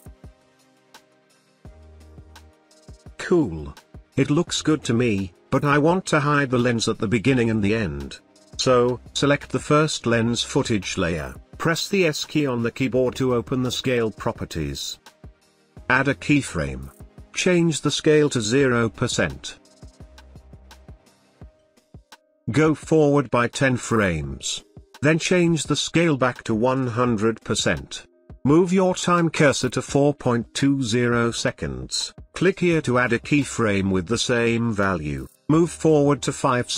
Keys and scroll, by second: 11.0 s.